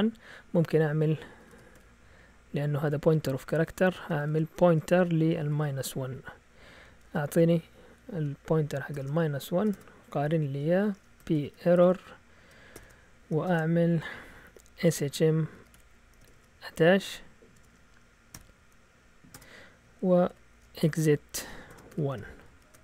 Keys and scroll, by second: 1.1-2.2 typing, 4.1-5.9 typing, 6.9 shift+Tab, 8.6-13.4 typing, 14.5-16.8 typing, 17.5 shift+Tab, 18.1-18.8 typing, 19.3 Return, 20.0-22.8 typing.